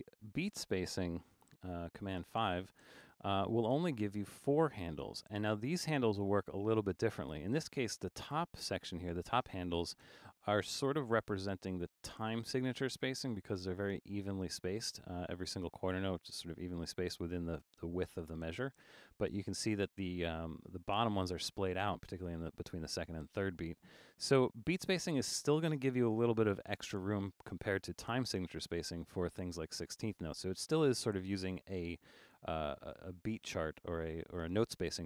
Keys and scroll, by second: 0.0 super+a, 1.2 super+5.